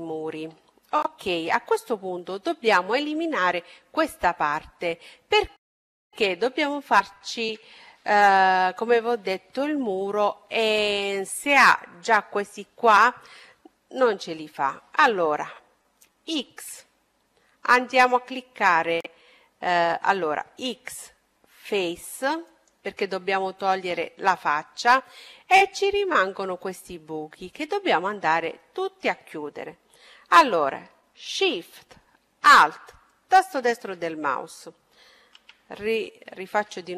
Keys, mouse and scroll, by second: 3.0-5.1 middle drag, 5.3-9.2 middle drag, 18.3 x, 19.7 x, 23.4-26.9 middle drag, 27.9-29.9 middle drag, 32.3-34.2 right drag, 33.3-35.4 middle drag, 34.7 a, 36.7 a.